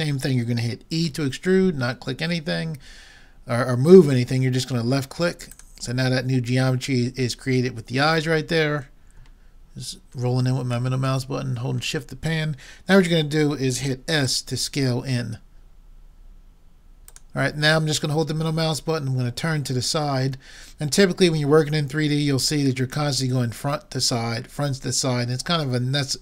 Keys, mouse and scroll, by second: 1.1 e, 7.6-9.9 middle drag, 10.9 middle click, 14.3 s, 18.3-20.1 middle drag, 22.9-24.4 middle drag.